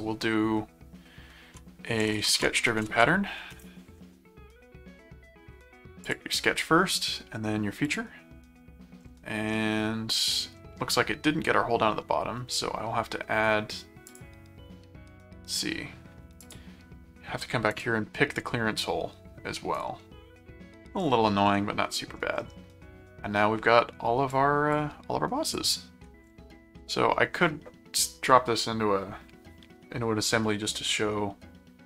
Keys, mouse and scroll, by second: 1.7-3.7 typing, 6.0 click, 7.8 click, 9.5-10.5 middle drag, 14.1 click, 16.4 click, 17.7 click, 19.7 click, 21.5 middle click, 24.3 click, 25.5 click, 26.8 middle click.